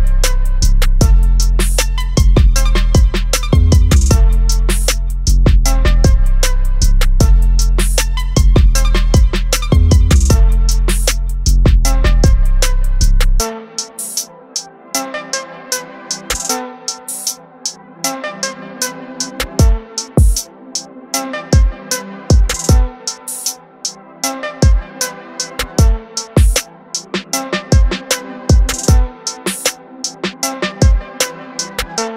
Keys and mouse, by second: 0.0 click, 3.8 click, 5.6 click, 17.7 click, 21.2 click, 30.8 click.